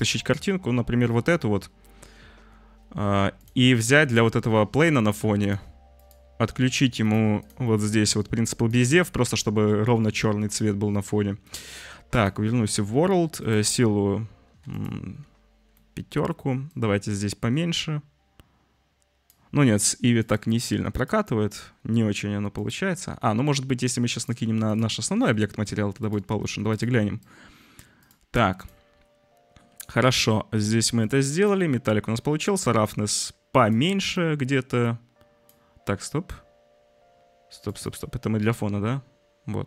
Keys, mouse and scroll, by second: 5.5-6.1 drag, 7.0 click, 7.3 click, 7.7 click, 8.6 drag, 11.5-12.2 drag, 12.8 click, 13.3-14.7 drag, 15.8 click, 16.7-19.3 drag, 20.3-21.1 drag, 24.2-24.7 drag, 25.1 click, 25.9 drag, 26.7 click, 27.2 click, 30.1 click, 32.1-33.6 drag, 34.2-35.4 drag, 36.2-37.8 drag.